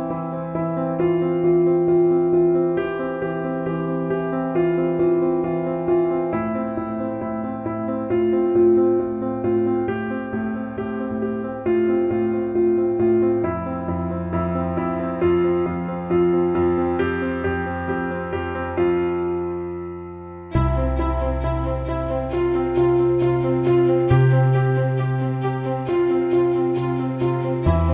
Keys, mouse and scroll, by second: 1.4-3.3 alt+middle drag, 4.7 click, 6.2-7.6 drag, 7.2 e, 10.1 click, 11.4 click, 18.8 click, 23.0 click.